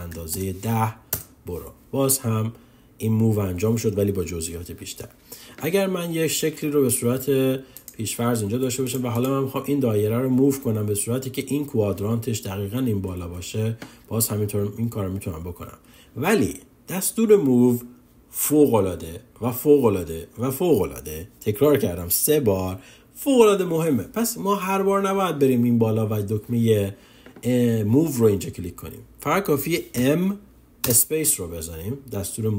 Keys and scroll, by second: 30.3 m.